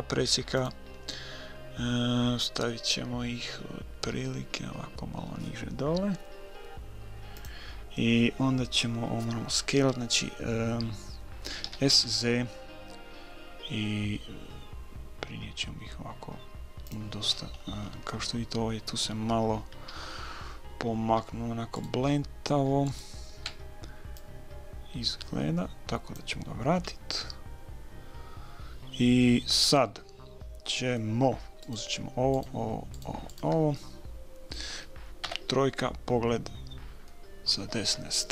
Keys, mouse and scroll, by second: 11.6 s, 17.2-19.8 middle drag, 19.8 a, 21.7-24.6 right drag, 24.2-25.9 drag, 26.5-28.7 middle drag, 29.5-31.6 middle drag, 31.6-33.8 right drag, 33.8-35.8 middle drag, 34.0-35.1 drag, 35.2 KP_3, 37.1-38.3 middle drag.